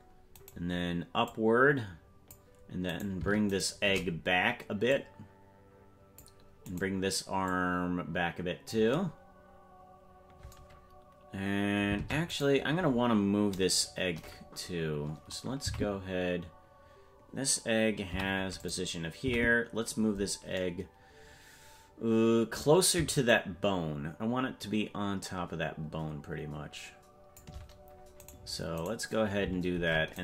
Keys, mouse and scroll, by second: 0.4 right click, 1.3-2.4 drag, 3.0 right click, 3.6 shift+right click, 4.9-6.2 drag, 6.8 right click, 7.5-8.8 drag, 12.0 ctrl+Tab, 12.4-14.0 right drag, 15.7 Left, 18.1 i, 19.3 Right, 23.3-27.4 shift+drag, 28.3 right click, 28.9 right click, 29.8 ctrl+Tab.